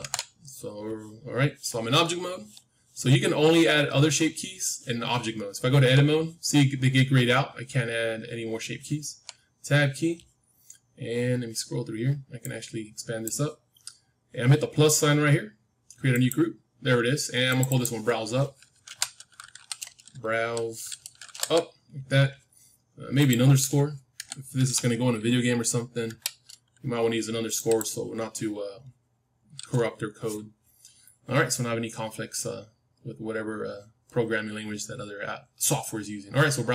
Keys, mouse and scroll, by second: 1.2-3.3 middle drag, 5.6 Tab, 9.0 Tab, 10.3-13.2 middle drag, 12.3-14.3 drag, 13.7-16.1 middle drag, 16.1-36.7 drag.